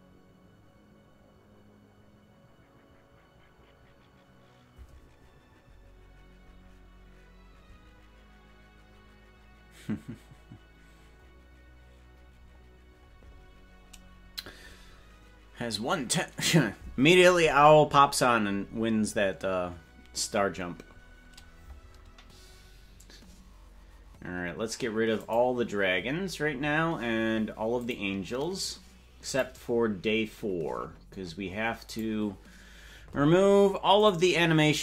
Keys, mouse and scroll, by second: 25.6 click, 26.5-28.3 scroll up 2, 28.3 click, 28.3 scroll up 5, 29.7 click, 29.8-30.4 scroll up 1, 30.4-31.5 scroll down 4, 31.5-32.3 scroll down 3, 32.3 click, 34.0 right click.